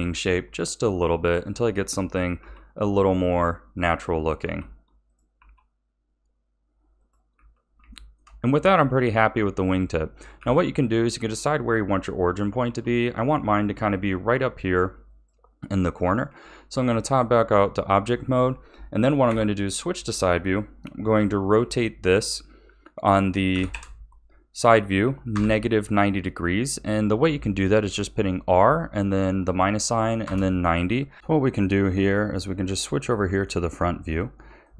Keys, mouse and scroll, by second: 2.4 g, 3.8 click, 4.4 g, 5.4 r, 7.3 a, 7.9-10.4 shift+middle drag, 10.4 a, 12.6 g, 16.2 Tab, 19.4 KP_3, 21.6 r, 32.1-34.0 shift+middle drag, 34.0-34.6 scroll up 2, 34.6-34.7 shift+middle drag.